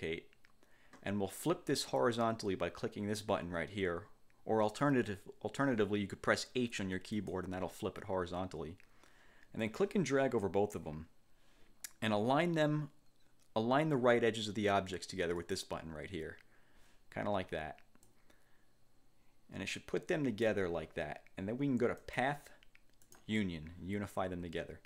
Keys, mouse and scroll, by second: 7.3 click, 9.7-11.1 drag, 15.5 click, 18.1-20.7 drag, 22.1 click, 23.1 click.